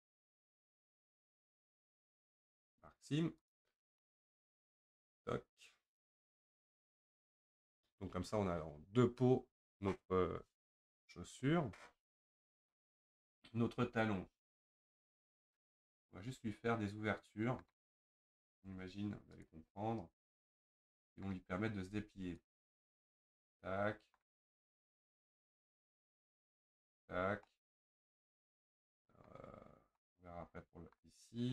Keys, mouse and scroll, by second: 0.5-1.8 shift+middle drag, 1.8 ctrl+click, 2.2 scroll down 4, 2.7-4.0 right drag, 4.0 scroll down 1, 4.0-7.1 middle drag, 17.8 scroll down 1, 17.9-18.6 scroll up 5, 19.4 click, 20.2-20.6 scroll down 2, 20.6 scroll up 1, 20.6-22.5 middle drag, 22.5 ctrl+click, 23.1-25.2 middle drag, 25.2 shift+click, 27.2-27.5 scroll down 1, 27.5-31.2 middle drag, 31.2-31.5 scroll up 4.